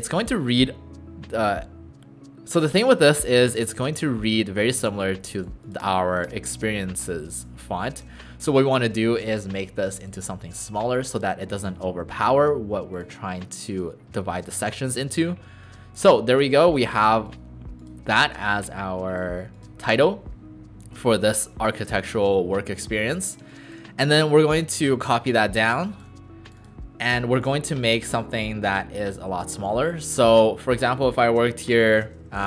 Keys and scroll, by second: 8.1 ctrl+a, 23.4 alt+space, 29.2 ctrl+a, 32.1-32.4 typing.